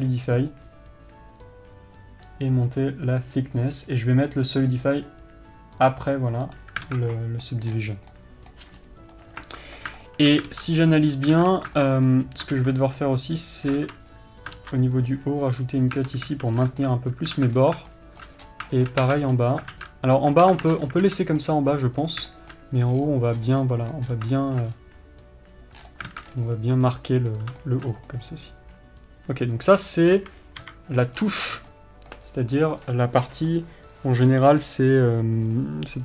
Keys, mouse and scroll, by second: 5.3 click, 6.5-7.6 drag, 7.4 alt+a, 7.6-9.7 middle drag, 8.3 scroll down 2, 9.3 scroll up 2, 9.7 click, 10.6-13.4 shift+middle drag, 11.0 alt+z, 11.3-11.8 scroll up 1, 14.3 ctrl+z, 17.3 scroll down 1, 17.9 alt+a, 18.1 scroll down 1, 18.5-19.7 middle drag, 19.0 scroll up 1, 19.7 scroll up 2, 20.3 alt+z, 21.3 scroll down 2, 21.6 alt+z, 22.6 scroll down 2, 23.5-24.6 scroll up 4, 24.6 scroll down 2, 24.9 shift+middle click, 25.3 scroll up 2, 26.3-27.0 scroll down 6, 26.6-36.0 middle drag, 31.3 KP_3, 31.8 scroll up 2.